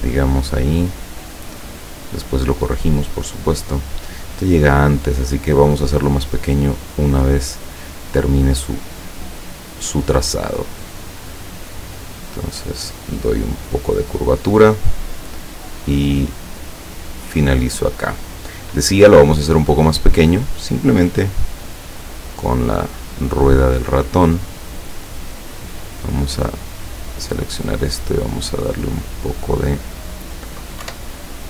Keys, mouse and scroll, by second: 1.8 click, 8.6 click, 9.9 click, 11.4 click, 12.2-12.9 drag, 15.1 click, 16.7 click, 17.3 click, 19.2 click, 19.7 click, 21.3 click, 25.4 click, 26.4 click, 26.8 click, 27.9-29.7 drag, 30.9 Up.